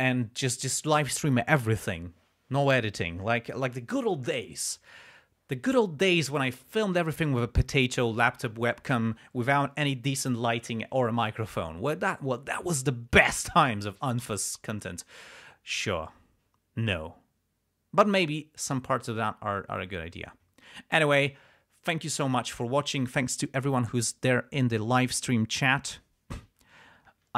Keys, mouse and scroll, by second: 24.9 click.